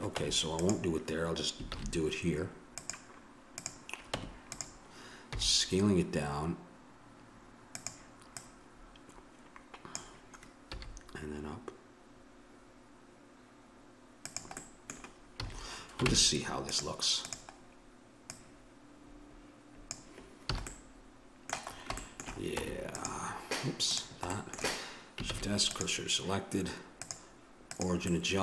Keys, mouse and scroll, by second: 0.2 Tab, 1.7 shift+a, 4.2 Tab, 5.4 s, 8.3-10.3 drag, 10.7 s, 14.6 middle click, 15.4 a, 16.1 ctrl+Tab, 17.2-18.8 right drag, 20.5 a, 22.6 Tab, 22.9-24.3 right drag, 24.3-25.7 middle drag, 25.3 shift+s, 27.0-28.1 drag, 28.1 middle click.